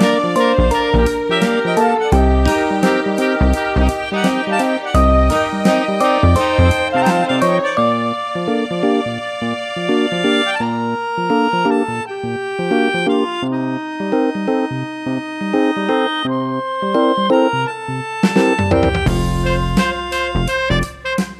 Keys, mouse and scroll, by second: 0.2 Up, 0.5-1.4 scroll up 1, 1.4-2.6 scroll down 1, 2.6 Left, 5.8 BackSpace, 7.9 Up, 15.8 click, 17.4 click.